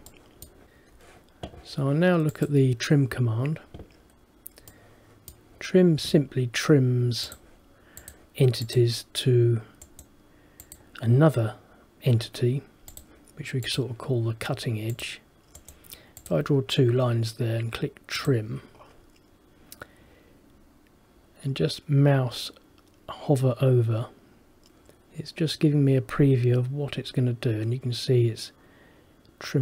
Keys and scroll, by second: 0.8 ctrl+z.